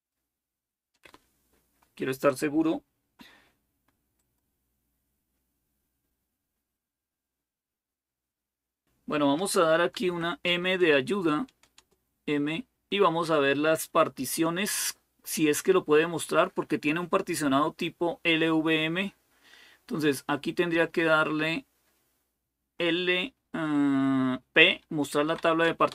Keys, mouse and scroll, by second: 4.4 click, 9.8 m, 11.6 Return, 25.0 p, 25.7 Return.